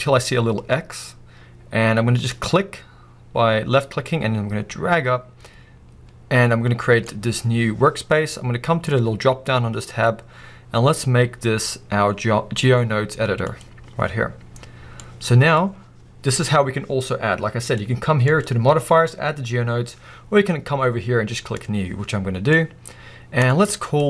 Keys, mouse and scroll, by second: 15.7-16.3 scroll up 1, 21.6 click, 22.1-24.0 middle drag, 22.5 scroll up 1.